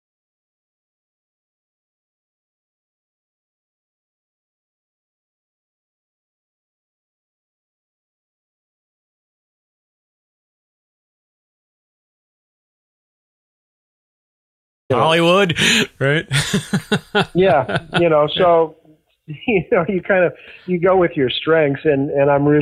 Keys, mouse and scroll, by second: 13.2 click, 14.7 click, 15.6 ctrl+s, 19.7-20.9 drag, 21.3 click.